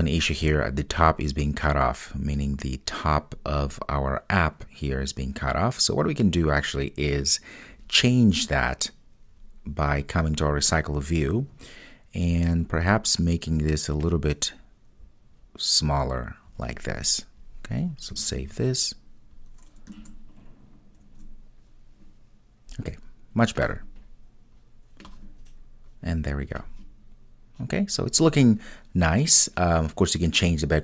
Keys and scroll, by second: 18.4 super+s.